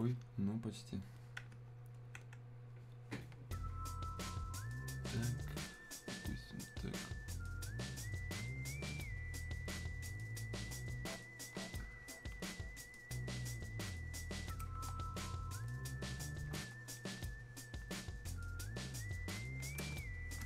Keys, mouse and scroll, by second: 1.9-4.7 drag, 4.7-13.8 drag, 14.9 click, 19.9 ctrl+shift+click.